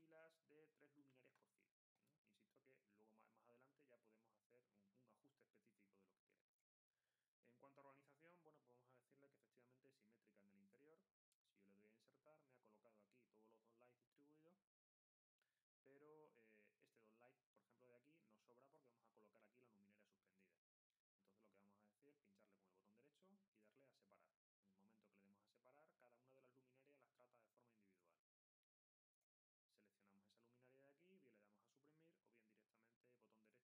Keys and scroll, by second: 1.1 3.